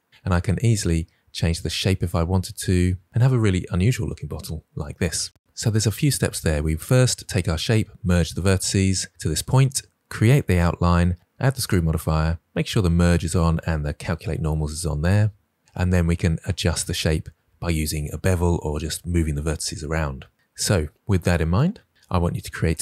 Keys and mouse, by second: 0.2 click, 0.6 g, 1.4 click, 3.8 click, 4.0 g, 4.9 click, 20.3 Tab, 22.0 click.